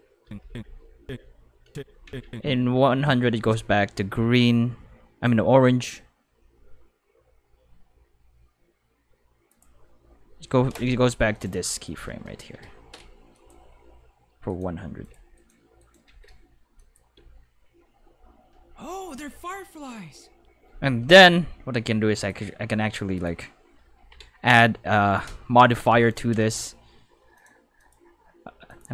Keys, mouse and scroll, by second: 9.5 click, 11.3 right click, 12.1-13.0 typing, 13.3 click, 14.5 right click, 14.7-16.0 typing, 15.0 click, 15.3 right click, 15.8 right click, 16.8 click, 17.1 space, 20.6 space, 21.2 a, 22.2 click, 23.2 click, 25.8 5, 26.0 right click, 27.3 click, 27.8 click, 28.7 click.